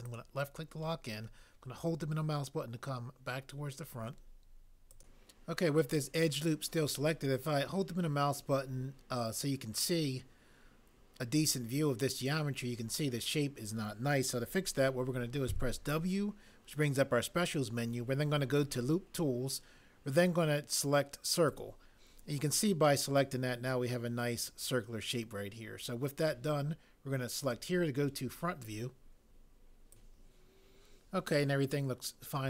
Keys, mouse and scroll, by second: 15.5 w.